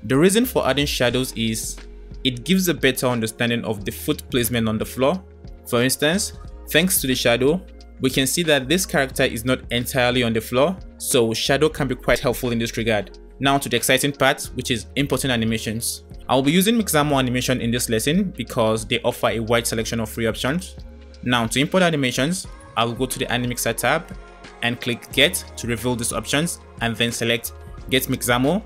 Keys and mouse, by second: 2.0-3.4 middle drag, 4.2 middle click, 10.6-12.6 middle drag, 14.5 middle click, 15.4 middle drag, 25.0-28.2 middle drag.